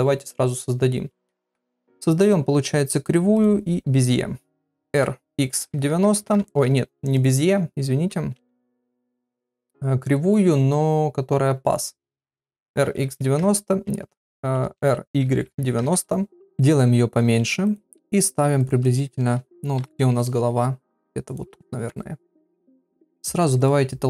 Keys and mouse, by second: 1.4 shift+a, 4.9 r, 6.4 ctrl+z, 6.8 x, 8.3 shift+a, 12.5 r, 14.0 ctrl+z, 14.8 r, 16.5 s, 17.8 g, 18.9 shift+middle click, 19.8 KP_7, 20.3 g, 21.9 KP_1, 23.6 click.